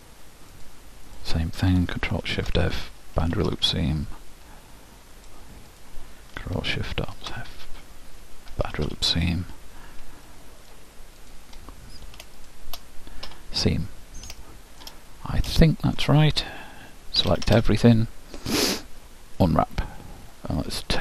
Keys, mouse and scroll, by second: 0.7-2.8 drag, 3.4 ctrl+alt+shift+', 5.3-7.6 ctrl+alt+shift+drag, 8.8 ctrl+alt+shift+', 10.4-11.4 middle drag, 11.4-14.5 drag, 14.5-17.1 middle drag, 17.3 a, 17.6 a, 18.6 u.